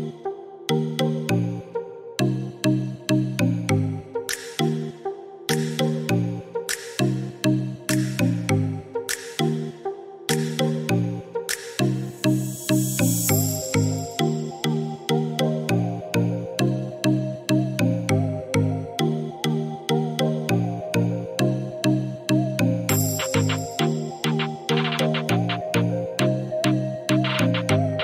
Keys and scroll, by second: 15.7 2, 16.3 7, 19.9 2, 20.7 Return.